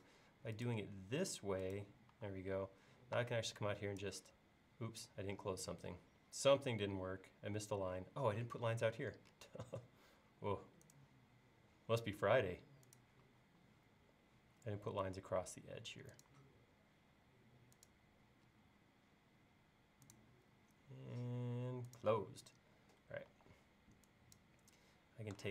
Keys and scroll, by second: 2.2 e, 8.4 l, 13.3 l, 18.5 l, 23.4 e.